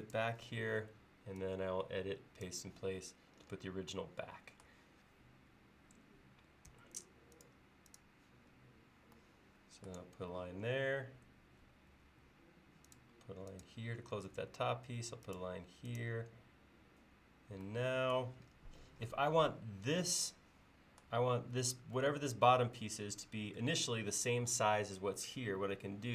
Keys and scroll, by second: 6.8 l, 11.9 Escape.